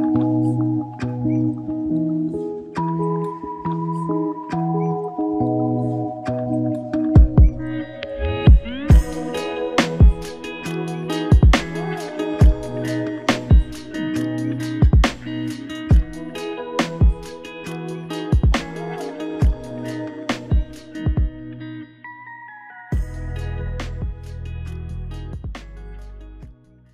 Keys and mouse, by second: 5.8 double click, 10.1 shift+click, 11.2 alt+click, 12.9 alt+click, 13.9 double click, 16.5 shift+click, 16.8 shift+double click, 17.1 shift+click, 17.7 shift+click, 20.1 alt+click, 21.3 shift+click, 23.1 ctrl+alt+click, 23.8 alt+click, 25.4 alt+click.